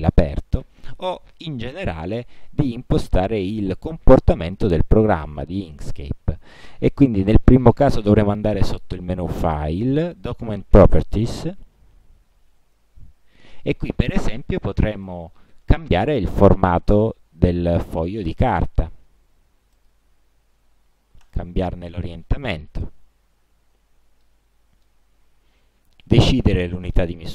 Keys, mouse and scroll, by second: 9.6 click, 11.0 click, 12.9 click, 15.2-16.2 drag, 17.6-18.0 scroll down 2, 18.0-18.4 scroll up 2, 18.4-18.7 scroll down 2, 18.9-19.2 scroll down 2, 19.9 click, 21.4 click, 22.1 click, 23.2-23.7 ctrl+scroll down 2, 23.7-24.1 ctrl+scroll up 2, 24.4 ctrl+click, 26.2 click, 26.8-27.3 drag.